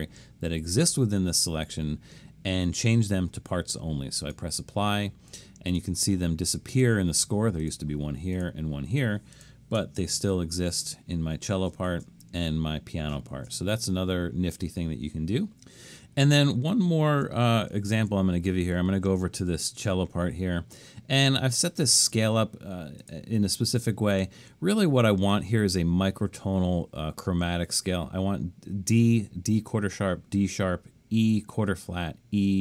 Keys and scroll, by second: 10.0 alt+super+., 10.4 alt+super+., 11.9 alt+super+., 13.4 alt+super+., 16.2 super+=, 16.6 super+=, 17.8 super+=.